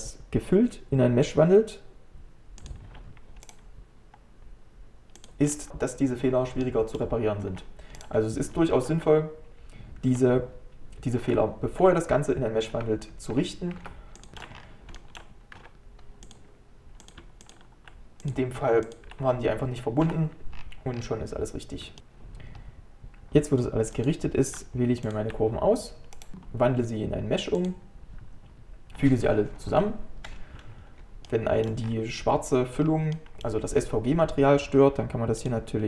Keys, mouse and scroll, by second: 3.5-5.5 right drag, 5.5 scroll up 1, 5.7 scroll down 1, 6.6 middle click, 7.5 g, 8.8 ctrl+z, 9.0 ctrl+z, 13.4 Tab, 14.3 shift+middle click, 14.6 scroll up 1, 15.0 shift+middle click, 15.6 x, 17.4-20.1 shift+drag, 20.1 f, 20.6-21.1 scroll down 10, 22.0 click, 22.6 scroll down 1, 24.0-26.2 drag, 26.2-28.2 right drag, 29.7 ctrl+j, 31.3 middle click, 31.9-32.8 scroll up 4, 32.8 scroll down 2, 33.2-35.5 middle drag, 35.5-35.8 click.